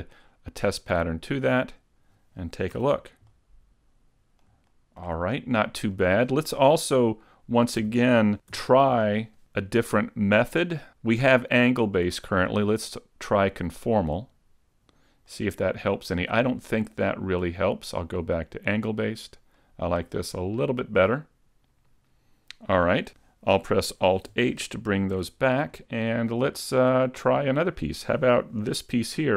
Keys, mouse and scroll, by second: 1.7 shift+middle click, 1.7 click, 2.8 a, 3.4 middle click, 4.7 shift+middle click, 5.3 middle click, 7.8 a, 8.6 u, 12.2 click, 15.3 middle click, 17.7 click, 19.6 middle click, 23.2 Tab, 23.2 right click, 24.4 alt+h, 25.2 a, 25.5-25.8 scroll down 1, 25.8 middle click, 26.6 shift+middle click, 27.0-27.7 scroll up 2.